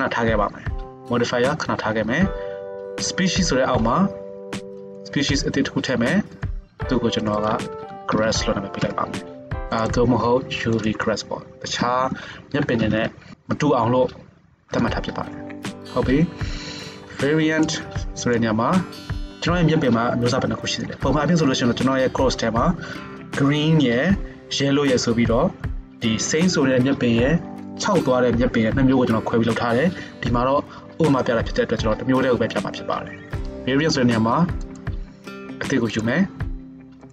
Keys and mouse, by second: 5.0-6.3 drag, 7.3 click, 8.3 s, 11.9 Left, 12.0 Left, 13.2-34.8 middle drag, 34.8-35.9 drag, 35.9-37.1 middle drag.